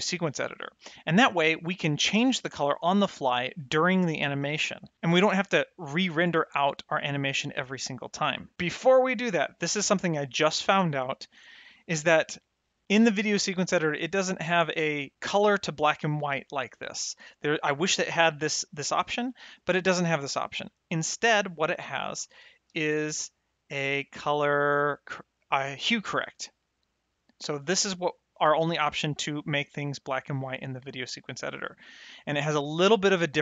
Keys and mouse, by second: 9.2 ctrl+shift+click, 11.6 middle click, 13.2 click, 18.7 click, 21.4 middle click, 22.6 shift+a, 26.0 click.